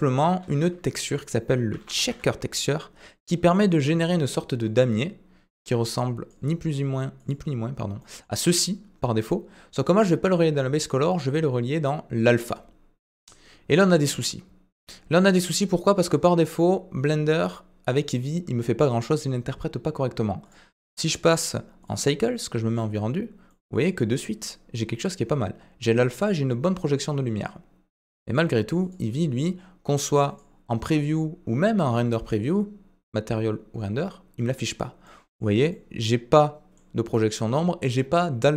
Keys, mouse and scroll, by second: 0.0 click, 0.4 shift+a, 3.5 typing, 5.5-6.4 drag, 7.2 click, 8.0 middle drag, 10.9-12.5 drag, 15.3-18.0 middle drag, 20.5 drag, 21.2-21.9 drag, 22.7 click, 23.5 middle click, 26.0-26.4 middle drag, 28.2-29.0 drag, 30.3 click, 32.2 click, 35.0-35.5 middle drag, 35.7-36.7 middle drag.